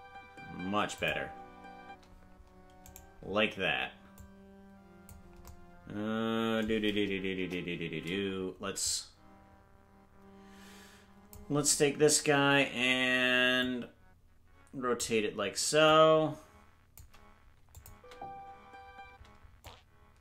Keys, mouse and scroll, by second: 0.9 click, 1.8 space, 2.9-4.1 right drag, 4.1 click, 7.3 KP_0, 8.8-11.3 drag, 13.5-14.9 drag, 15.8-16.9 drag, 17.7 click, 17.9 space, 19.6-20.2 drag, 19.6 space.